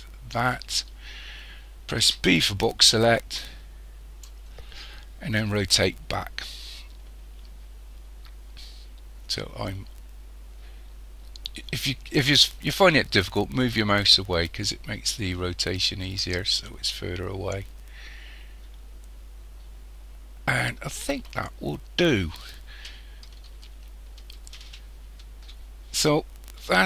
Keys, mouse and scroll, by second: 2.1 b, 5.6 r, 21.7-23.8 scroll up 3, 23.8-25.6 shift+middle drag, 25.6-26.4 scroll up 1, 26.4-26.7 scroll up 2.